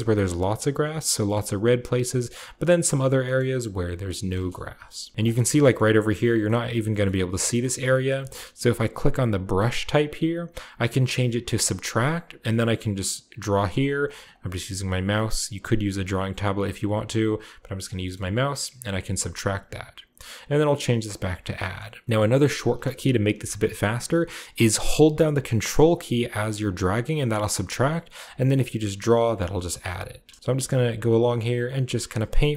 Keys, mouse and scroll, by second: 0.0 click, 0.1 middle click, 0.3 click, 0.4 middle click, 0.5 click, 0.6 middle click, 0.7 click, 0.8 middle click, 0.9 shift+click, 1.3-3.9 shift+middle drag, 1.3-3.0 shift+scroll up 1, 1.7 shift+click, 1.8 shift+click, 2.0 shift+click, 3.0 scroll down 1, 4.5 KP_0, 5.1 f, 5.3-5.7 scroll down 1, 5.7-6.8 shift+middle drag, 6.7-7.8 scroll down 2, 6.9 middle click, 8.0 middle click, 8.0-8.7 scroll up 1, 8.7-9.9 shift+scroll up 1, 9.2 shift+click, 11.5 click, 12.1-18.0 drag, 17.9-19.4 shift+middle drag, 20.2-22.0 drag, 21.5 shift+middle click, 22.1-24.1 shift+middle drag, 22.1-22.9 shift+scroll up 1, 22.9-24.1 shift+scroll up 1, 24.1-25.2 scroll up 1, 25.2-30.2 ctrl+drag, 25.2-28.2 ctrl+middle drag, 25.2-26.1 ctrl+scroll up 1, 28.7-29.2 scroll down 1, 30.2 shift+middle click, 30.4 shift+click, 30.4-31.7 scroll up 1, 30.9 f, 31.0-32.5 middle drag, 31.7-32.5 scroll down 1.